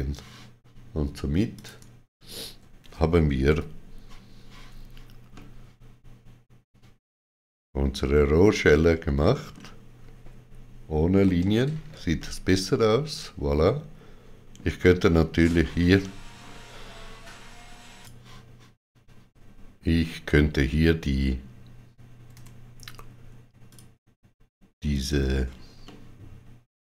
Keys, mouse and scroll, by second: 1.5 click, 2.2 shift+click, 5.3 middle click, 11.2 shift+w, 12.1 middle click, 15.0-15.4 scroll up 3, 17.9 click, 23.6 click, 25.7 middle click.